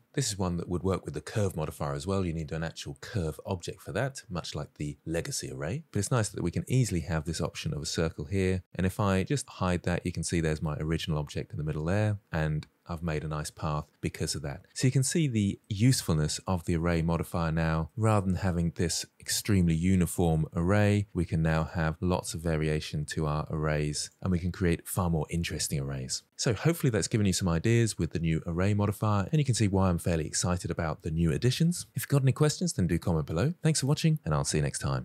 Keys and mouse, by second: 1.1-5.8 drag, 6.5-7.5 middle drag, 9.4 click, 11.8 click, 15.3 shift+middle drag, 15.5-16.9 middle drag, 18.2 drag, 18.6 shift+middle click, 19.3 middle click, 19.6 shift+middle drag, 20.2 middle click, 21.3 click, 21.8-22.4 middle drag, 22.9 click, 23.2 shift+middle click, 23.7 click, 24.0 middle click, 24.5 click.